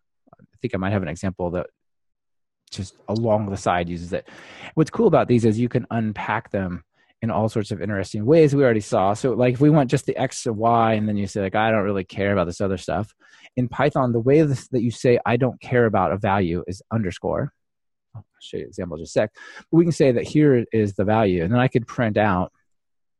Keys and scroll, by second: 21.0 Escape.